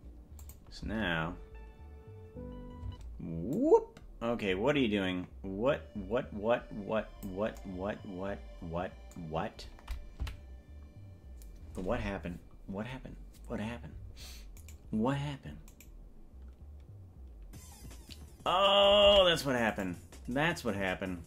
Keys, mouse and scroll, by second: 0.6 click, 1.0 space, 3.0 space, 3.7-7.5 drag, 10.6 Right, 15.0 right click, 16.0 right click, 19.3 ctrl+Tab, 20.1 right click.